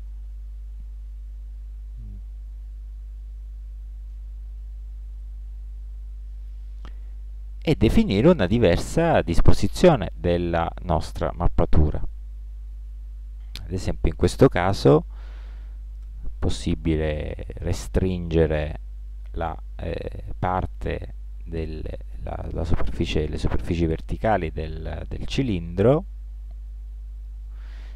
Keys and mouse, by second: 12.1-13.6 middle drag, 14.4 ctrl+l, 16.2 s, 23.6-26.2 middle drag, 26.2 g.